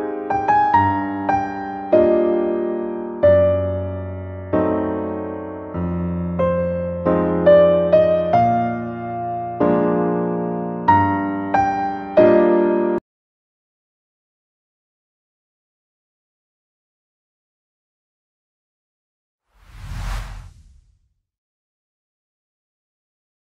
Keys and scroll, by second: 2.9 shift+BackSpace, 6.4 ctrl+d, 11.5 ctrl+;.